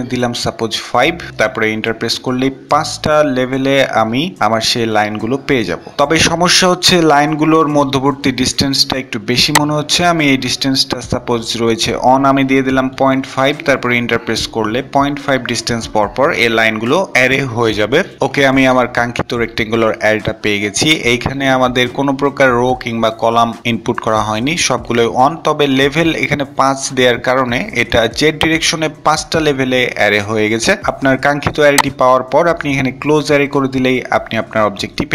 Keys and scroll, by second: 1.2 typing, 10.8 typing.